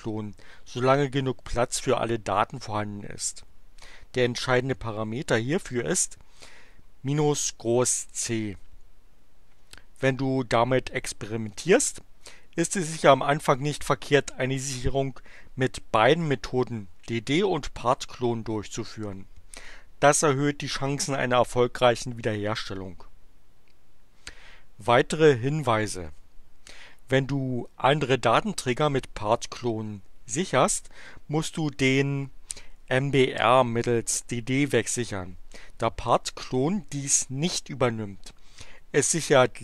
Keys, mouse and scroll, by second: 26.1 q.